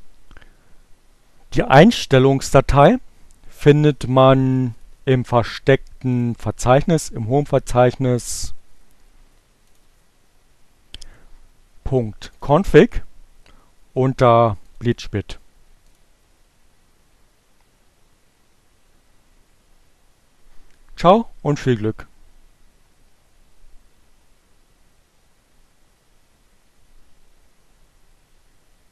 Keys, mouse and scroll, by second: 6.1 click, 8.0 click, 10.0 click, 11.5-12.8 drag, 15.0 click, 15.7 click.